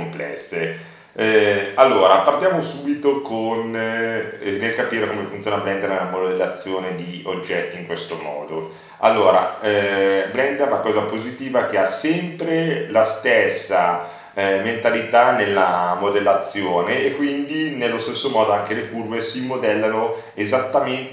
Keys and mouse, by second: 10.4-15.2 middle drag, 16.2-19.6 middle drag, 21.0 w.